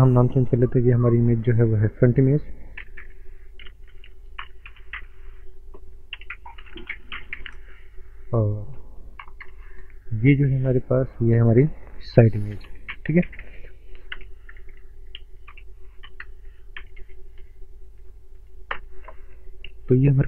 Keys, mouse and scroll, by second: 0.2 click, 0.3 click, 3.3 typing, 4.7 typing, 6.1-7.5 typing, 9.3 BackSpace, 9.5 Return, 11.1 click, 11.4 click, 12.9-14.2 typing, 16.9 typing, 18.7 Return.